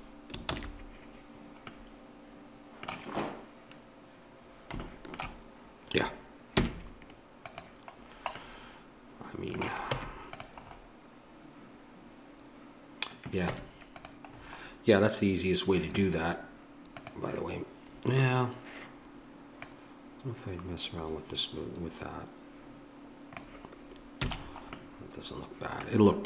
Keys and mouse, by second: 0.4 ctrl+z, 1.7-3.9 middle drag, 6.6 Tab, 9.9 Tab, 10.4 middle click, 13.5 Tab, 14.3-16.9 middle drag, 16.9-18.6 drag, 18.6-24.2 middle drag, 24.2 a.